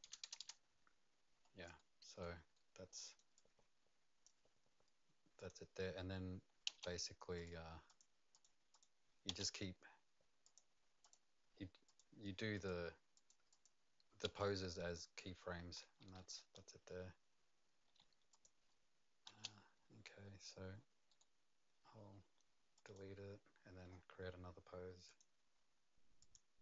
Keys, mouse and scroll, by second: 0.0 KP_Enter, 1.7 KP_Enter, 2.5 right click, 3.3 click, 5.4 Return, 5.4 click, 6.7 right click, 6.7 space, 7.3 click, 7.5 click, 7.5 space, 7.9 click, 8.3 click, 8.7 click, 9.3 space, 10.4 click, 11.0 click, 11.2 click, 11.8 click, 12.5 click, 13.1 click, 13.5 click, 14.2 space, 14.2 6, 15.9-19.3 typing, 17.1 click, 17.4 click, 17.6 click, 18.3 click, 21.1 right click, 22.7 click, 23.8-24.7 scroll up 6, 25.1 click, 25.1-26.2 scroll up 2, 26.2 click.